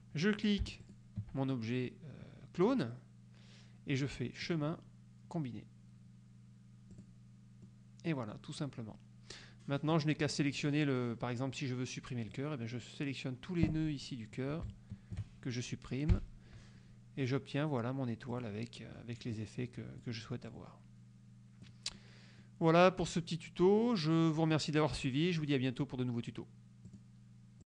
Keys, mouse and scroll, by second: 0.9 shift+click, 4.6 click, 7.0 click, 7.7-8.6 drag, 10.0 click, 12.4-14.0 drag, 14.8-15.5 shift+drag, 16.2 Delete, 18.4 click, 19.4-20.3 drag, 20.6-22.0 drag, 22.1-22.7 drag, 27.0 click.